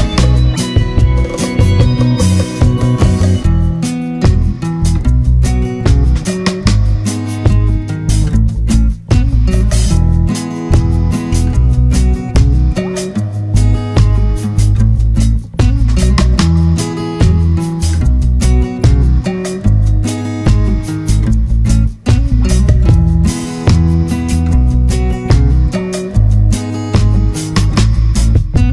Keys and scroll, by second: 18.1 ctrl+=, 19.8 ctrl+0, 24.9 ctrl+z.